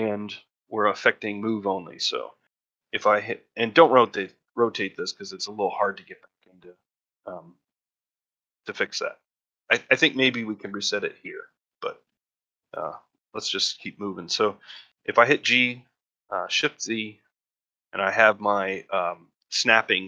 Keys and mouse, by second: 11.9 n, 13.4-13.8 middle drag, 15.2 g.